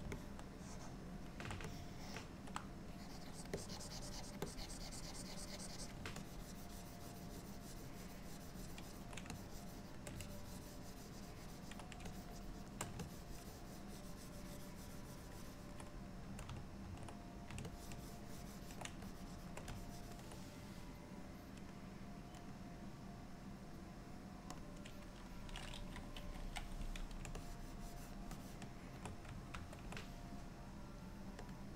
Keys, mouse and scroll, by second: 0.2 middle click, 1.8 ctrl+middle click, 3.0 click, 3.4 click, 3.6 click, 4.5 click, 6.3 ctrl+click, 9.4 shift+click, 10.3 ctrl+click, 12.2 shift+click, 12.4 shift+click, 13.1 ctrl+click, 16.9 ctrl+z, 17.8 ctrl+click, 19.1 shift+click, 19.8 ctrl+click, 21.8 click, 22.5 click, 28.4 ctrl+click, 29.6 ctrl+z, 31.5 click.